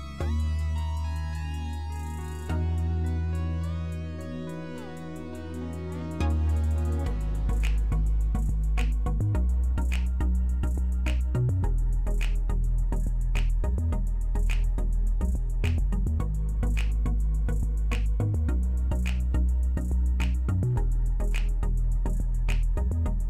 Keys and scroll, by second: 8.3 typing, 9.5-10.2 typing, 19.7-20.4 typing.